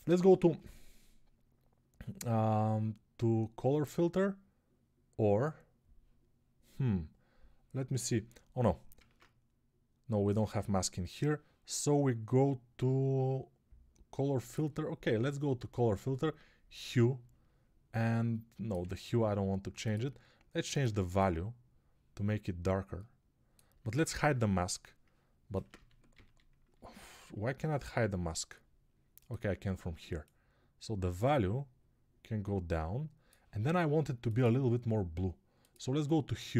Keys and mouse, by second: 8.8 ctrl+Tab, 18.7 ctrl+z, 24.2 h, 25.6 alt+x, 26.9 h, 29.9-34.6 middle drag, 34.6-36.5 drag.